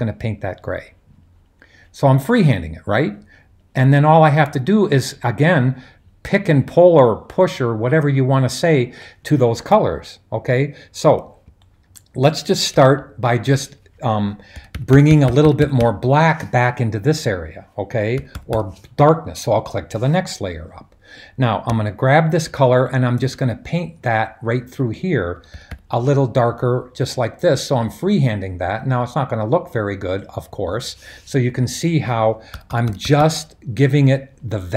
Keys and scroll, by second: 14.7-15.7 typing, 18.0-18.8 typing, 25.3 [, 25.5 [, 25.7 [, 32.5-33.1 typing.